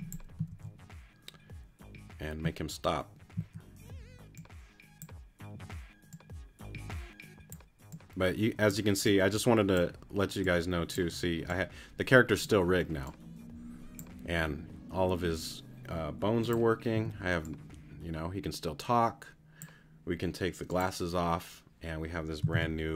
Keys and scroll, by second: 0.8 super+z, 3.3 z, 16.9 t, 22.5 super+r.